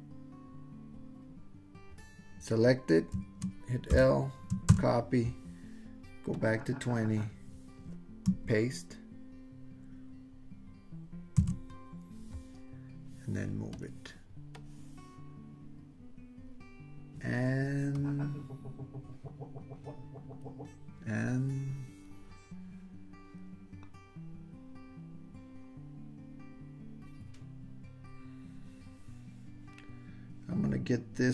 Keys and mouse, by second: 3.9 l, 4.7 super+c, 6.5 click, 11.4 super+v, 13.8 click, 14.6-16.5 drag, 18.1-20.6 drag.